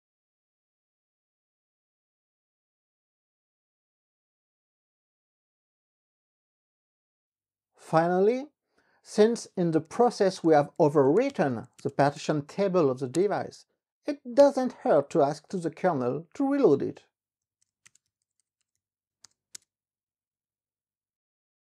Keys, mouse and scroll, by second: 9.8-13.5 typing, 14.6 Return, 17.4-20.1 typing, 20.3 Return.